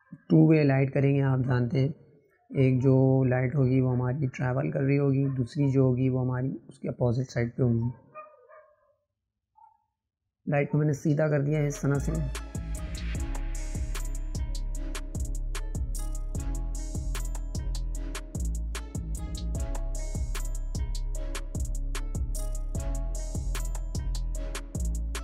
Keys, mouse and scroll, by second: 5.0 right click, 5.8 click, 7.6-12.6 right drag, 12.6 click, 13.8 click, 14.6-15.4 middle drag, 15.4 scroll down 1, 15.6 shift+middle click, 16.2-18.6 drag, 19.7-22.8 drag.